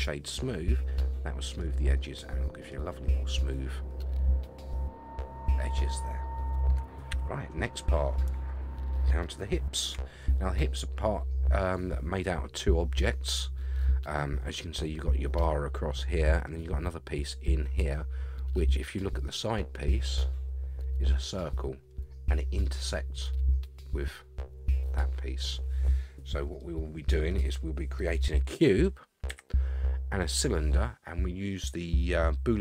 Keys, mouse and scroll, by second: 1.0-1.6 middle drag, 1.9-2.7 middle drag, 3.9-5.9 middle drag, 6.2 scroll down 3, 7.1 KP_1, 9.2-9.9 shift+middle drag, 17.8-20.0 middle drag, 17.8 scroll down 1, 25.9-26.5 scroll down 2, 26.6-27.3 middle drag, 27.5-27.8 scroll up 1, 29.3 KP_1.